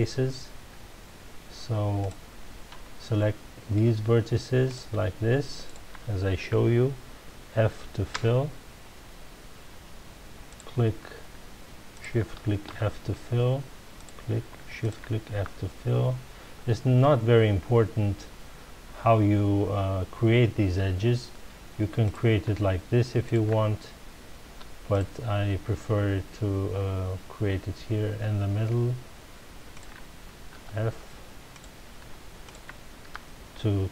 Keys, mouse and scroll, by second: 2.0 click, 3.2-4.6 middle drag, 4.6 click, 5.6 shift+click, 8.1 f, 10.5 click, 11.9 shift+click, 12.6 f, 13.9 click, 14.8 shift+click, 15.3 f, 22.0 click, 23.2 shift+click, 24.9 click, 29.7 shift+click, 30.5 f, 31.5 click, 32.4 shift+click, 33.0 f.